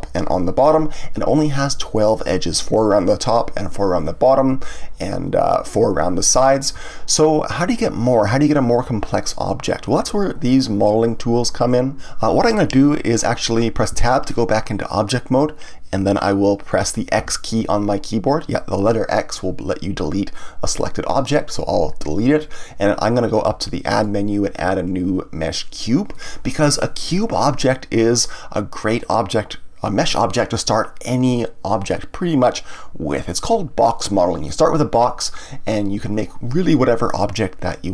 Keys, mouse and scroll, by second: 13.9 Tab, 23.9-26.9 drag.